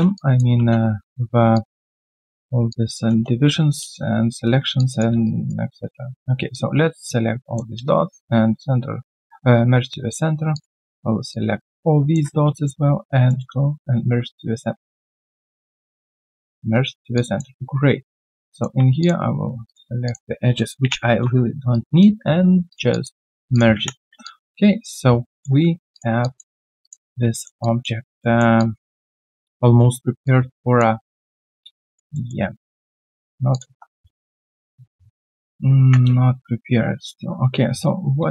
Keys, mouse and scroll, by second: 0.5 Return, 3.0 Return, 4.4 Return, 4.7 alt+click, 5.1 alt+q, 5.1 click, 5.2 right click, 6.2 Tab, 7.8 shift+right click, 10.9 Tab, 12.5 Tab, 12.6 shift+right click, 15.8 shift+right click, 17.1 alt+click, 17.5 q, 17.8 right click, 19.0 shift+click, 20.8 ctrl+Delete, 21.7 right click, 22.2 scroll down 1, 22.9 alt+click, 23.1 alt+right click, 23.7 3, 24.2 alt+click, 25.0 alt+click, 25.5 scroll down 3, 26.2 alt+click, 26.6 alt+right click, 26.8 alt+click, 27.1 q, 27.3 alt+middle click, 27.6 alt+click, 28.2 alt+middle click, 28.6 alt+click, 30.2 alt+click, 31.0 alt+middle click, 31.3 alt+click, 32.1 alt+middle click, 33.7 1, 35.8 ctrl+shift+c, 37.6 q, 37.8 right click.